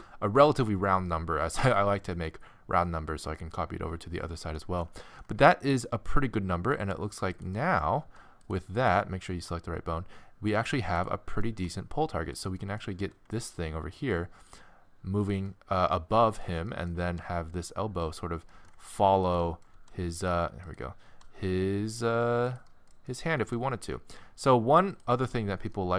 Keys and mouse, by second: 1.3-5.7 middle drag, 5.8 middle click, 6.0 middle click, 7.3-10.5 drag, 8.0 g, 9.4 g, 11.1-14.5 middle drag, 11.5 g, 13.0 g, 15.2 right click, 15.5 middle click, 16.3 middle click, 17.0 g, 19.8 g, 21.1 g, 23.4 g, 25.2-25.9 middle drag.